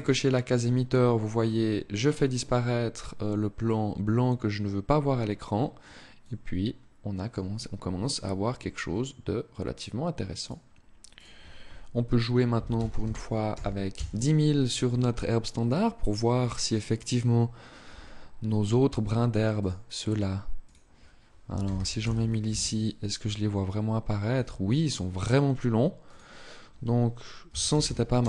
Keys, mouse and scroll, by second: 5.9 click, 10.1 click, 10.9 click, 19.3 click, 20.3 click, 25.9 click.